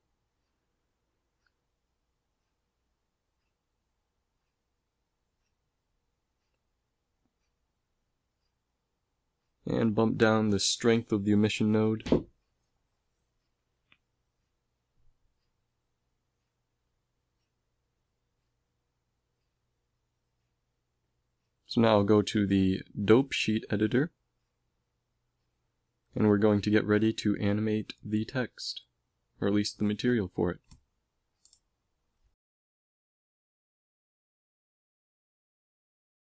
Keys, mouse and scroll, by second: 1.3 middle click, 4.2 ctrl+s, 6.4 g, 11.9-13.7 drag, 13.7 middle click, 14.2 z, 14.4 z, 15.6 ctrl+s, 20.8-29.8 drag, 30.6-32.6 middle drag, 32.8-33.9 middle drag, 34.5-36.3 middle drag.